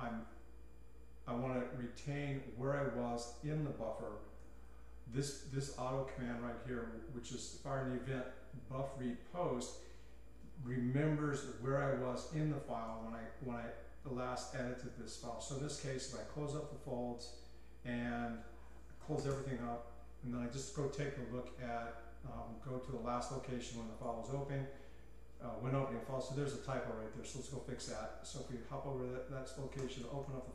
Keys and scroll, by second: 0.0-0.3 typing, 4.4-5.3 typing, 16.0-16.7 typing, 19.1-19.8 typing, 21.3 k, 22.5-25.7 typing, 27.5-30.5 typing.